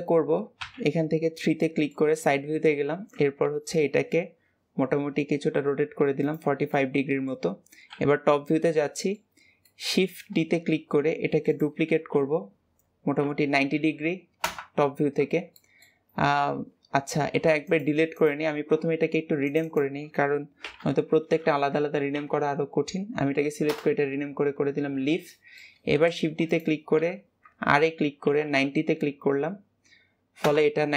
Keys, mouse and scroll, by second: 0.5 KP_3, 1.5-2.7 shift+middle drag, 2.7 r, 6.5-7.7 middle drag, 7.7 KP_7, 8.7-10.9 shift+middle drag, 10.9 shift+d, 11.8 r, 15.4-17.3 shift+middle drag, 17.3 x, 18.0 click, 19.3 click, 19.5-22.5 drag, 25.1 shift+middle click, 26.0 shift+d, 26.8 r.